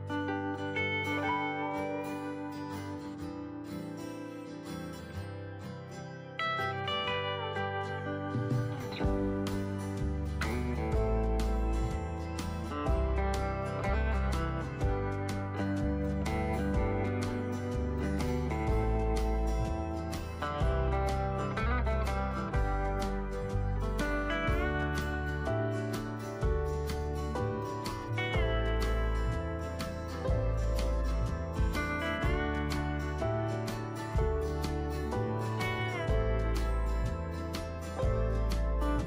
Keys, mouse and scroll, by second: 19.9 alt+click, 21.6-33.9 drag, 38.5 ctrl+click.